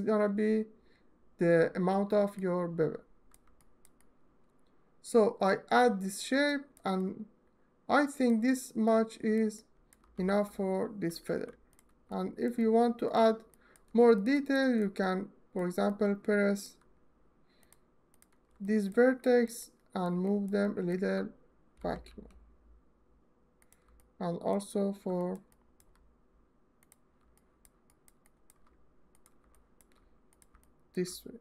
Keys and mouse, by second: 2.0-3.0 ctrl+drag, 3.6 alt+middle click, 8.1 ctrl+alt+middle click, 9.0 ctrl+alt+middle click, 9.9 w, 10.9 1, 11.9 alt+shift+middle click, 11.9 click, 11.9 alt+shift+middle click, 12.1 click, 12.7 shift+click, 14.9 alt+click, 17.3 ctrl+right click, 17.8 ctrl+click, 18.7 ctrl+alt+middle click, 19.2 alt+middle click, 19.8 ctrl+alt+middle click, 20.4 alt+shift+middle click, 21.4 g, 21.7 y, 23.2 click, 23.6 middle click, 24.9 alt+middle click, 25.2 alt+shift+middle click, 27.5 alt+shift+click, 28.0 alt+click, 29.2 alt+shift+middle click, 30.4 alt+middle click, 31.2 g.